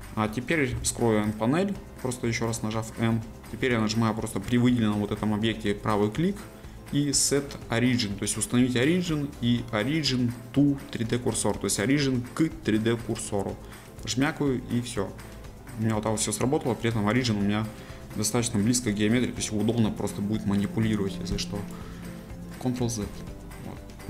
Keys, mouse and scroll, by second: 0.7 n, 2.1-5.1 middle drag, 5.8-8.9 right drag, 15.0-17.8 middle drag, 17.8-18.1 scroll down 2, 18.1 middle click, 18.8-20.0 scroll up 2, 20.0-23.6 drag, 23.6 scroll down 1, 23.7-24.0 middle drag.